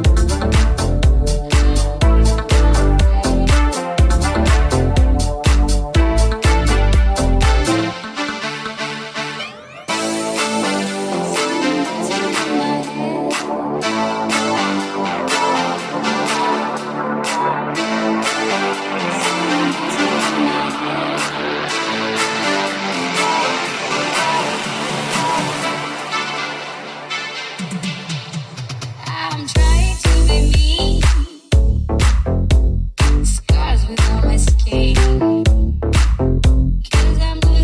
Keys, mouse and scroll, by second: 0.6 e, 3.6 g, 4.9 KP_1, 6.9 g, 7.5 e, 8.4 r, 12.8 e, 14.7 ctrl+z, 15.2 r, 15.7 g, 16.4 s, 19.6 alt+z, 21.1-31.8 shift+middle drag, 21.7 alt+z, 24.4 s, 25.2 g, 26.1 alt+z, 29.6 s, 32.1 ctrl+r, 32.9 g, 34.1-37.6 alt+middle drag.